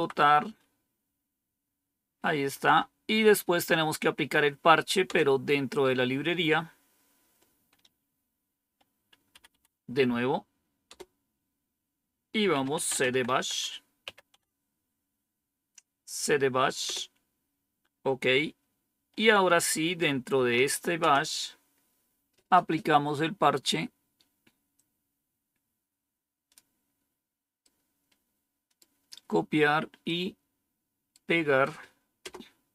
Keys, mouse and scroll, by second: 0.0-0.1 typing, 5.0 Return, 9.2 Up, 9.4 Up, 10.8 Return, 12.2-13.9 typing, 14.2 Tab, 16.8 Return, 20.0-21.0 typing, 24.7 click, 27.5 right click, 29.0 right click, 30.0 right click, 32.1 Return.